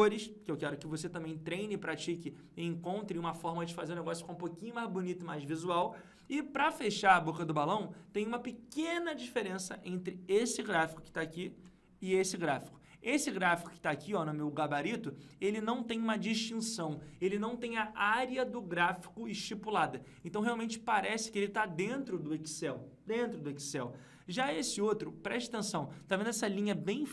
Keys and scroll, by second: 0.4 ctrl+Page_Down, 11.5 ctrl+Page_Up, 24.2 ctrl+Page_Down.